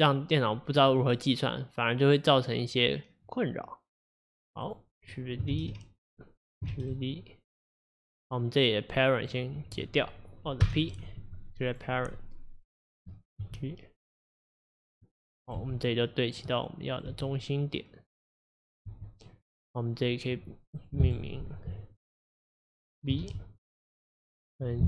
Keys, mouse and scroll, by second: 4.7 click, 5.6 shift+d, 8.4 click, 10.7 alt+p, 13.0 click, 13.5 g, 15.5 click, 15.6 g, 17.0 click, 17.1 g, 18.7 click, 18.9 g, 20.8 click, 21.1 F2, 24.0 click, 24.4 click.